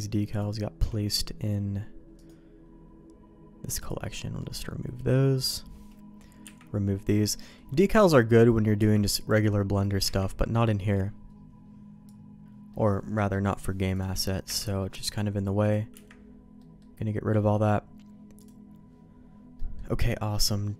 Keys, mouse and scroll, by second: 0.4 shift+click, 2.1-4.0 right drag, 4.4 middle click, 5.4-6.4 drag, 6.4 Delete, 6.9 middle click, 7.4 middle click, 8.0 click, 8.8 Delete, 9.2 click, 10.0 Delete, 12.7 middle click, 13.1 middle click, 13.9 click, 14.4 Delete, 14.8 middle click, 15.6 click, 15.9 Delete, 16.5 middle click, 17.3 middle click, 18.4 click, 19.5 middle click.